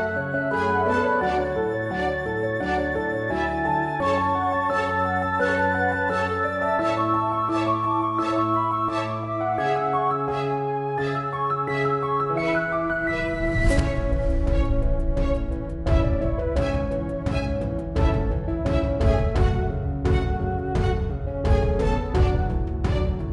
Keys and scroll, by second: 11.2-13.2 typing, 13.6 Return.